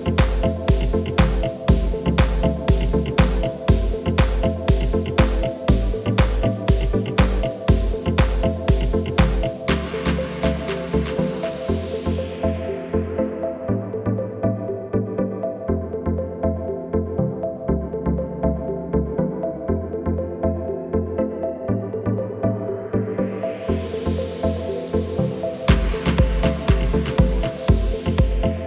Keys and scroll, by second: 6.1 r, 7.3 KP_9, 7.8 KP_2, 8.7 Return, 19.5 shift+s, 26.0 r.